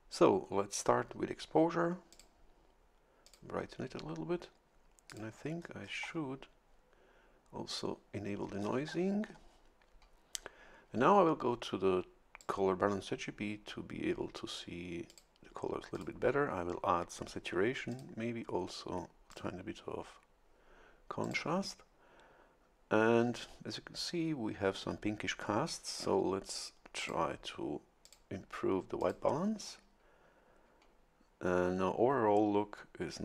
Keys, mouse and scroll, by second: 2.1 click, 3.2 click, 5.1 click, 5.6-6.4 scroll up 1, 7.7 click, 8.6-9.7 scroll down 3, 12.4 click, 15.1 click, 15.9 click, 17.9 click, 19.3 click, 21.2 click, 27.0 click, 28.0 click, 29.0 click.